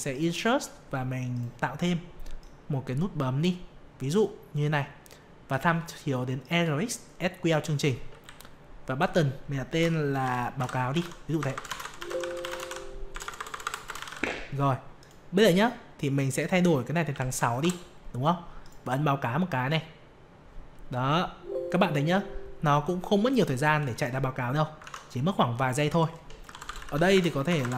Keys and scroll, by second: 24.8 alt+Tab, 26.7 ctrl+v, 27.1 ctrl+space.